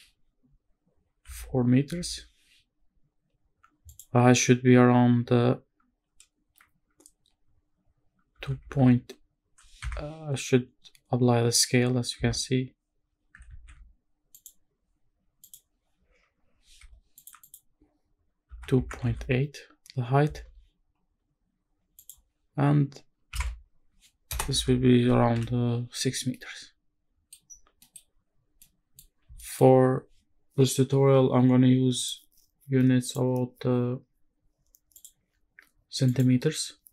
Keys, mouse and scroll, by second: 3.9-9.8 drag, 12.1 Tab, 13.5 ctrl+a, 15.4-17.2 drag, 17.4-20.3 drag, 22.0-24.6 drag, 26.1 scroll down 2, 26.3-27.3 middle drag, 27.5-27.8 scroll down 1, 27.8 middle drag, 28.0-28.6 scroll up 2, 28.6-29.0 middle drag, 29.4 shift+middle drag, 32.0 click, 33.0 click, 34.9-36.2 drag.